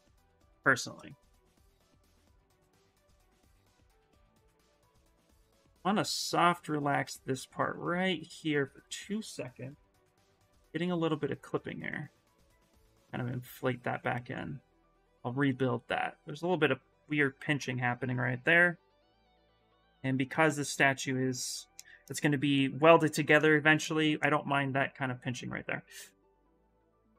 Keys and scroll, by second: 1.1 shift+d, 1.3 shift+d, 3.1 ctrl+z, 3.6 s, 4.7 d, 9.3-11.0 typing.